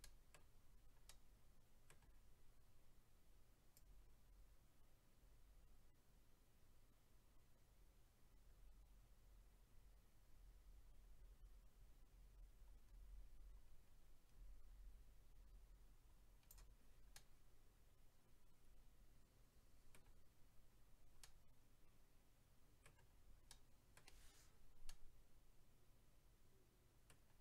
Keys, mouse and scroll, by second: 0.0 middle click, 1.1 middle click, 3.7 click, 17.1 middle click, 20.7-21.2 scroll down 1, 21.2 middle click, 23.1-23.5 scroll down 1, 23.5 middle click, 24.9 middle click.